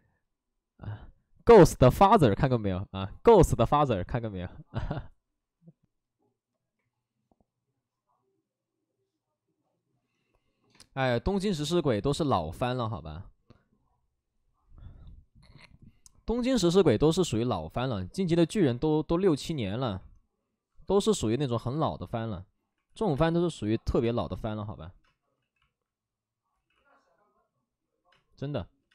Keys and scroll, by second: 20.8-23.9 typing, 25.3 ctrl+z, 25.3 space, 26.7 ctrl+z, 26.7 x, 28.0 space.